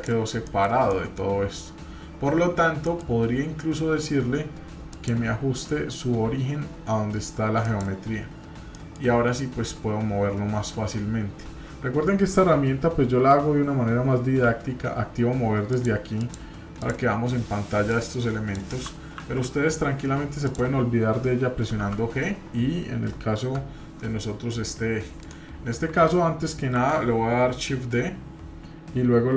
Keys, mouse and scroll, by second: 0.5 middle click, 0.9 middle click, 2.9 middle click, 4.9-7.8 drag, 8.7-9.1 middle drag, 15.7 click, 16.2 click, 16.8 click, 17.9 click, 19.2 ctrl+z, 20.4 click, 21.8 g, 26.8 shift+d.